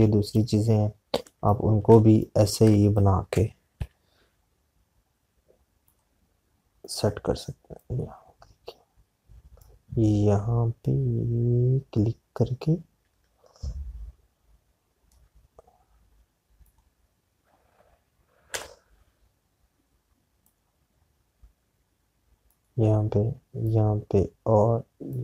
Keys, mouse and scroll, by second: 0.7 z, 1.5 click, 2.7 space, 3.1 click, 4.9 p, 6.8 click, 17.7 click, 19.4 /, 21.3 click.